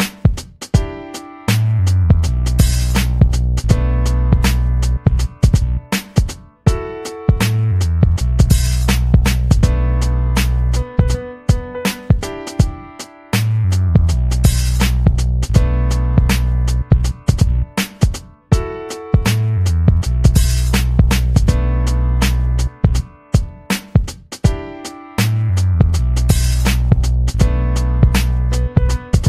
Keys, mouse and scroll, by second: 2.3 click, 3.2-3.8 ctrl+scroll up 6, 3.9-8.3 drag, 8.4 scroll up 2, 9.7-11.1 scroll up 8, 11.3 scroll down 2, 11.8-13.3 scroll up 2, 13.3 click, 13.8 click, 14.5-15.8 scroll up 10, 16.1 scroll down 2, 16.6-17.4 scroll up 4, 17.9 scroll down 2, 18.3-19.4 drag, 20.4 scroll down 2, 22.1 click, 22.7-24.7 typing, 25.3 click, 26.3 click.